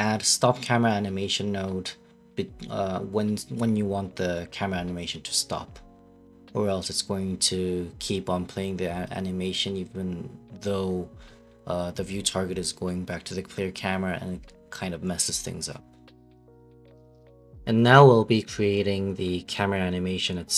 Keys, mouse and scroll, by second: 17.7 space, 17.7 s, 17.9 space.